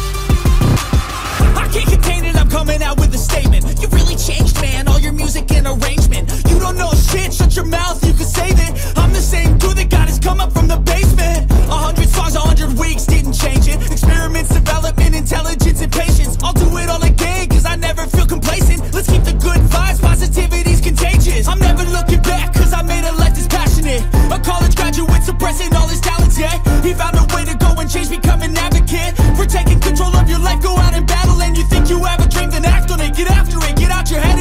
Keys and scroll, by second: 30.9 ctrl+z.